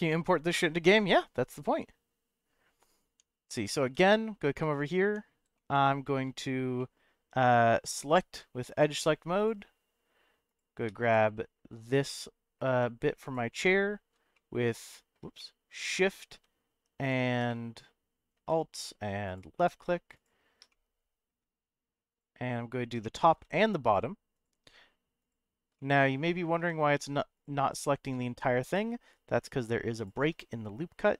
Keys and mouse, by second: 3.1 Tab, 4.1-4.5 shift+middle drag, 5.0 Tab, 5.5 shift+middle click, 6.8 middle click, 9.4 click, 10.4 click, 11.0 alt+click, 12.1 middle click, 14.3 alt+middle click, 15.4 middle click, 17.0 alt+shift+click, 17.5 middle click, 20.7 middle click, 22.1 alt+shift+click, 23.1 middle click, 24.3 alt+shift+click, 25.3 alt+shift+click, 25.7 middle click, 27.4 alt+shift+click, 28.2 middle click, 29.9 alt+shift+click, 30.4 middle click.